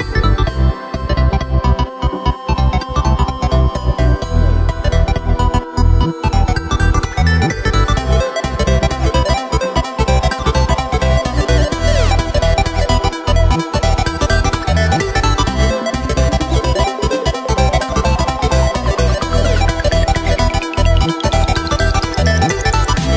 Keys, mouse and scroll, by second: 0.7 right click, 0.9 Tab, 2.5 ctrl+KP_1, 2.9-3.8 scroll up 2, 3.8 click, 5.3 right click, 5.6-7.4 drag, 7.4 middle click, 8.0 scroll down 2, 8.3 middle click, 8.9-9.5 scroll up 2, 9.5 e, 12.6-14.7 middle drag, 14.7 e, 16.6-18.0 middle drag, 18.0 right click, 18.3-19.0 middle drag, 19.0 shift+right click, 19.5-20.4 middle drag, 20.4 e, 21.5 Tab, 21.8-22.4 scroll down 6, 22.4 right click, 22.6 middle click.